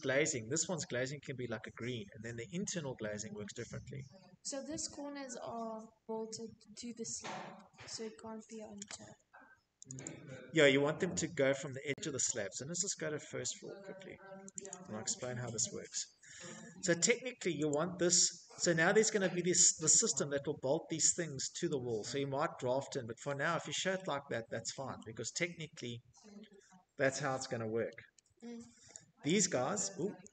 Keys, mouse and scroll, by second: 1.1-1.4 scroll, 5.5-6.2 scroll, 7.7 click, 7.8 click, 10.9-12.3 scroll, 12.3 click, 12.4 click, 13.3-14.1 scroll, 14.2 Escape, 14.5 Escape, 14.7 Escape, 15.4 click, 16.0 Escape, 16.8-17.3 scroll, 18.2-18.7 scroll, 20.7-21.3 scroll, 20.7 Escape, 22.1 scroll, 22.7-23.5 scroll, 24.0-24.4 scroll, 24.5 middle click, 25.7 middle click, 25.8 middle click, 25.9 middle click, 27.0 click, 27.4 Escape, 28.3 z, 28.9 click, 28.9 Escape, 28.9 scroll, 30.2 middle click, 30.2 z.